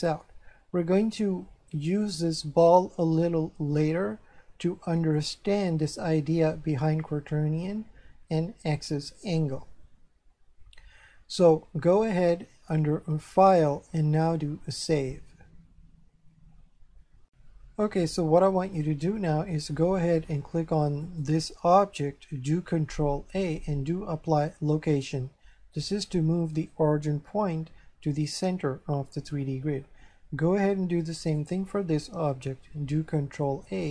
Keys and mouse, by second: 5.2 click, 13.3 click, 14.7 click, 17.3 F4, 17.4 F3, 21.1 right click, 23.2 ctrl+a, 24.7 click, 31.2 right click, 33.2 ctrl+a.